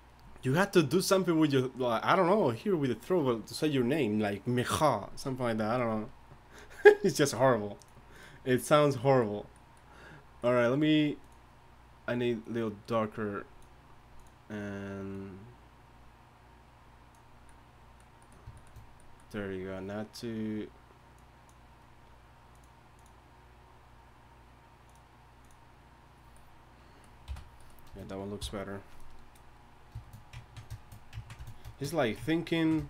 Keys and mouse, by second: 27.3 n, 28.4 t.